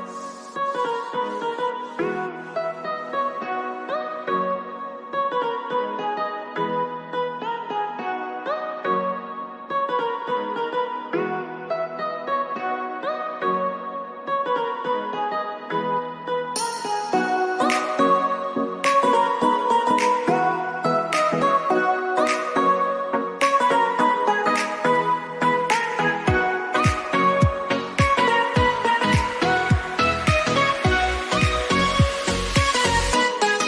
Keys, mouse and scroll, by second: 5.9 click, 7.4 click, 16.4 click, 17.3 ctrl+z, 19.3 ctrl+c, 19.6 ctrl+f, 20.3-21.7 shift+drag, 21.7 ctrl+z, 22.2 ctrl+click, 24.7 click, 27.3-30.4 drag.